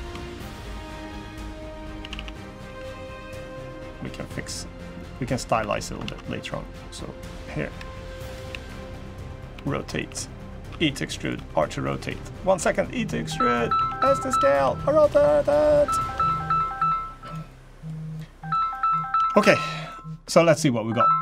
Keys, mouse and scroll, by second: 1.8 a, 1.9 a, 2.4 b, 3.6 g, 5.0 middle click, 5.3 3, 5.5 scroll up 3, 5.8 alt+z, 5.9 middle click, 6.6 click, 7.4 KP_3, 8.2 KP_1, 9.3-12.2 typing, 13.5 s, 14.2 r, 14.8 g, 15.9 Tab, 16.0 middle click, 16.5 scroll up 1, 16.6 scroll down 3, 17.0 click, 17.2 middle click, 17.9 middle click, 18.5 middle click, 18.9 Tab.